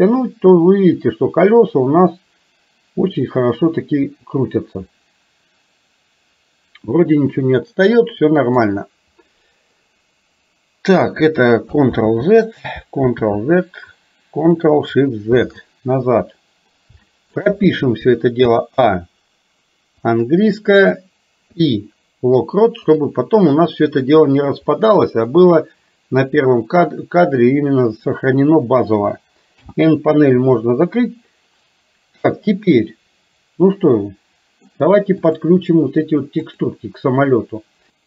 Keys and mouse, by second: 12.0 ctrl+z, 15.4 ctrl+z, 17.0 shift+middle click, 18.6 a, 20.3 click, 21.6 i, 24.8 middle click, 29.7 n, 30.8-34.7 middle drag, 35.3 click, 36.6 click.